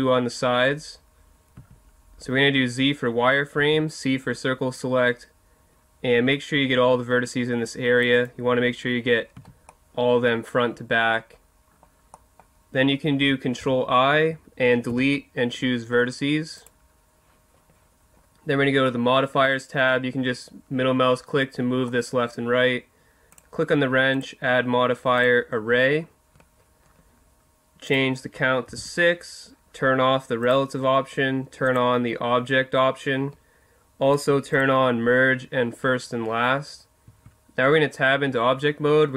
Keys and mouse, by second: 1.5 z, 3.6 c, 8.2 right click, 9.3 z, 10.1-11.5 middle drag, 12.1 middle click, 13.6 ctrl+i, 14.9 Delete, 23.3-25.2 middle drag, 25.2 click, 27.9-29.6 drag, 30.4-33.5 drag, 34.1-36.2 drag, 37.1 Tab.